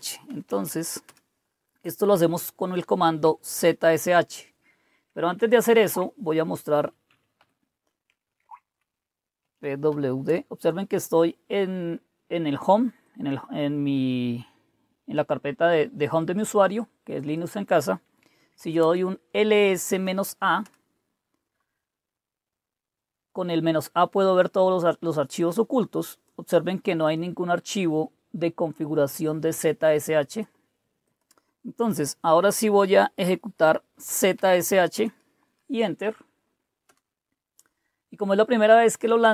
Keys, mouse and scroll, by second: 0.0-1.1 typing, 2.9-4.0 typing, 5.3-10.3 typing, 12.9-15.1 drag, 16.1 click, 17.1 click, 18.1-20.2 typing, 20.5 Return, 25.3 click, 26.9 click, 27.6-30.8 drag, 31.0 click, 34.0-34.9 typing, 36.8 Return.